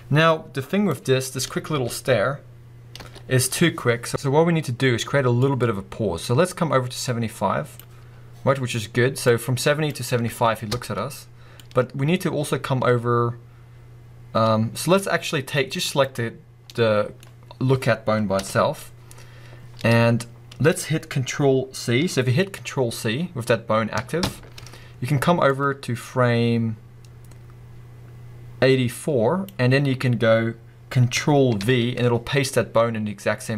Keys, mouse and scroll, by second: 1.0-7.8 drag, 1.1-1.7 scroll down 2, 1.7 space, 3.0 space, 4.5-5.5 scroll up 1, 8.0 scroll up 1, 9.2-16.0 drag, 10.2 space, 10.7 space, 16.7-25.5 middle drag, 18.3 KP_1, 24.2 ctrl+c, 25.5-33.5 drag, 31.6 ctrl+v.